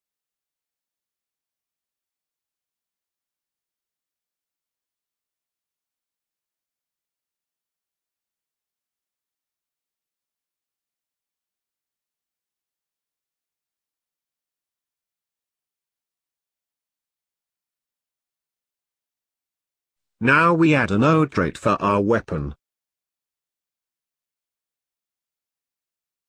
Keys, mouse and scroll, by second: 0.2 scroll up 3, 0.4-1.1 middle drag, 1.1-1.5 scroll down 3, 1.5 s, 2.7 s, 3.5 scroll down 2, 3.7-6.0 middle drag, 6.0-9.0 right drag, 10.3 Left, 11.9 scroll up 1, 12.0-14.4 middle drag, 14.4 s, 15.3-16.2 scroll down 2, 16.2-17.2 scroll down 4, 17.2-18.0 middle drag, 18.0-18.5 scroll up 3, 18.5-19.2 middle drag, 19.2-20.2 scroll down 3, 20.2-20.8 scroll down 1, 20.8-22.2 scroll down 3, 22.2-22.7 scroll down 1, 22.7-23.1 scroll down 1, 23.1 drag, 23.4 scroll down 1, 23.6-26.2 middle drag.